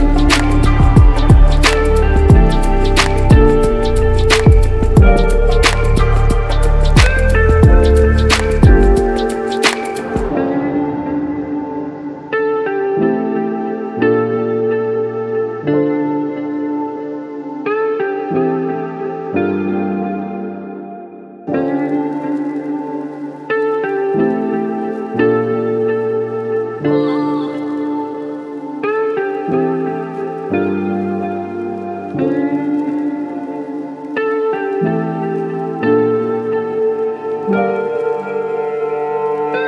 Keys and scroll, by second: 22.5 ctrl+t, 31.1 b.